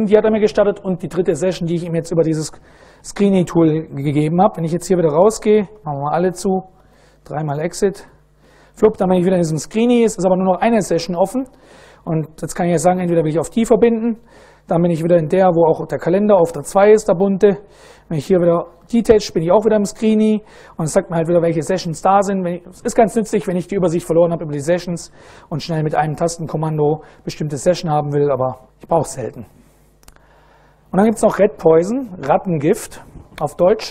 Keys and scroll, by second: 5.0 ctrl+e, 5.0-8.3 typing, 13.3 1, 13.5 Return, 15.0 ctrl+a, 16.0 2, 18.1 ctrl+a, 18.6 ctrl+d, 28.1 q, 28.4 Return.